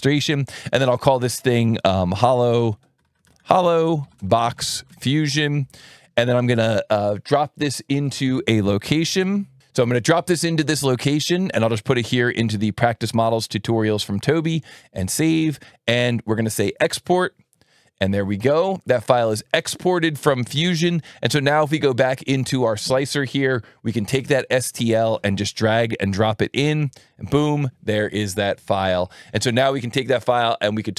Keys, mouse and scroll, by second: 0.4 click, 1.8-5.6 typing, 7.5 click, 8.9 ctrl+c, 14.3 click, 16.6 click, 21.6 click, 24.2-26.0 drag.